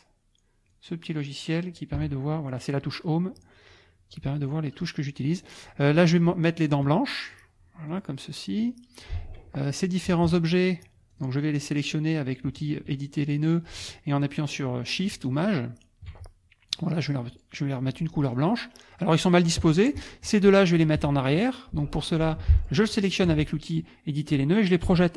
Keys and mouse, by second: 0.7 click, 2.0 Home, 3.6-5.0 drag, 6.1 F2, 6.2 click, 7.9 click, 8.6 click, 9.6 click, 10.3 shift+click, 11.1 shift+click, 14.9 shift+click, 17.3 click, 18.3 click, 18.9 click, 20.0 shift+click, 21.0 F1, 22.1 click, 22.4 F2, 22.6 click, 23.0 shift+click, 24.8 End.